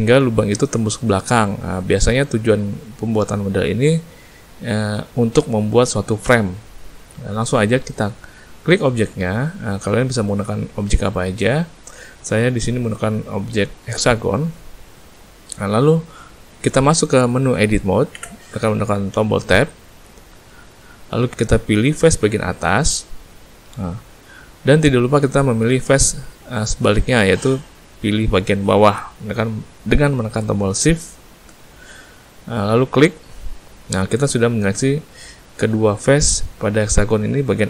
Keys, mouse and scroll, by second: 7.1 middle click, 8.2 middle click, 9.1 click, 18.1 Tab, 20.8 click, 25.4 middle click, 31.1 shift+click, 32.9 middle click.